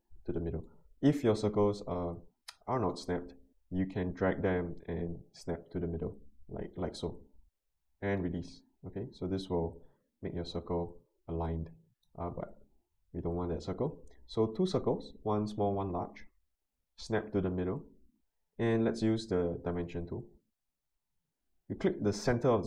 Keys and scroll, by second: 12.7 Delete.